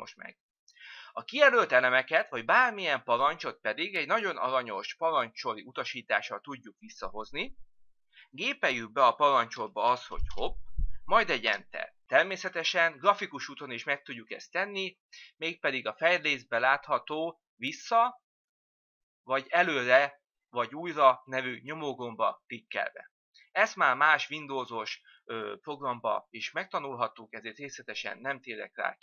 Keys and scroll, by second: 10.5 typing.